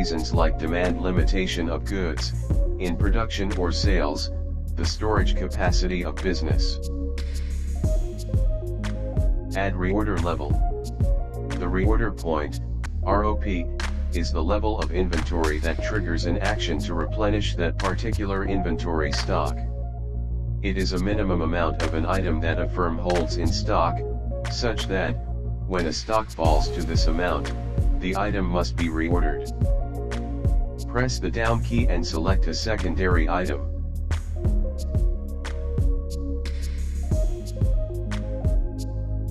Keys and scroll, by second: 30.6 Down.